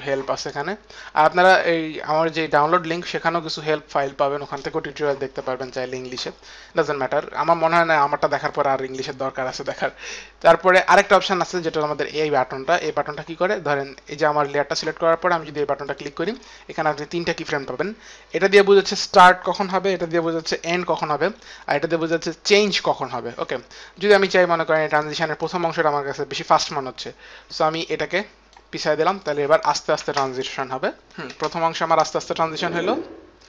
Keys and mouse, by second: 7.4 click, 8.8 click, 11.7 click, 15.7 click, 24.6 click, 27.7 click, 29.0 click, 30.5 space, 31.1 click, 31.1 space.